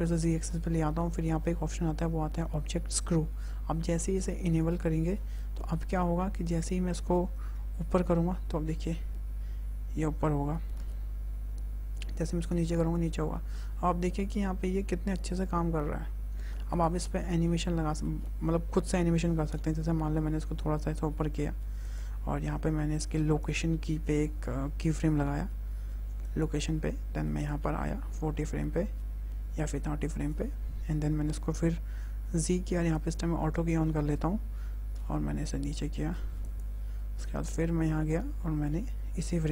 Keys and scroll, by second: 7.4 g, 10.6 z, 19.9 g, 20.8 z, 25.2 i, 33.7 g, 34.8 z.